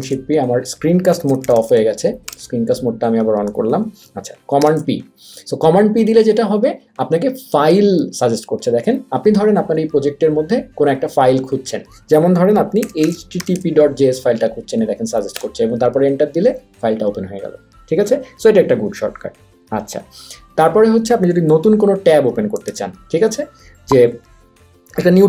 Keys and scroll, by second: 4.6 super+p, 12.5-13.9 typing, 15.4 Return, 22.8 super+w.